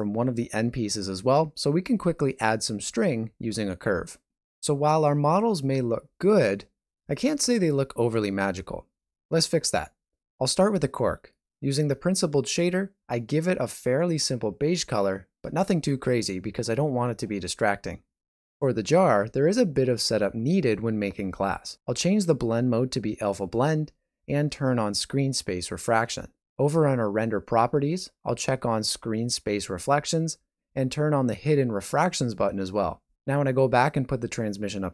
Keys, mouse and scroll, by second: 0.0 alt+a, 0.1 scroll down 3, 0.3 shift+middle click, 0.9 alt+shift+z, 1.0 middle click, 4.0 shift+middle click, 4.3 ctrl+middle click, 4.6 middle click, 5.0 shift+middle click.